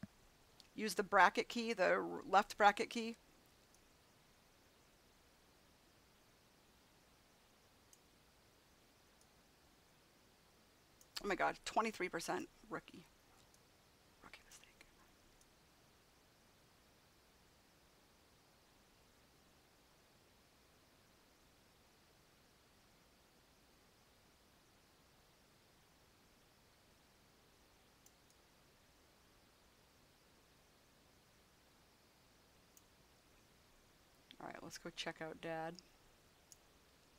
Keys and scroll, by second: 0.4 [.